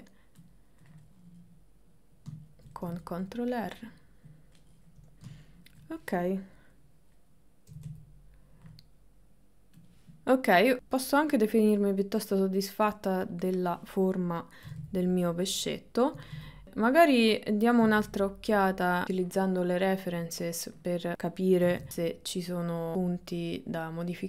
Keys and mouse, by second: 1.1-2.3 middle drag, 2.7 middle click, 3.2-4.2 ctrl+middle drag, 6.8 middle click, 7.8 g, 10.4-11.4 middle drag, 11.6-12.8 middle drag, 13.3 click, 13.6 middle click, 14.7 g, 16.2 g, 19.8 middle click, 21.7 g, 22.9 g.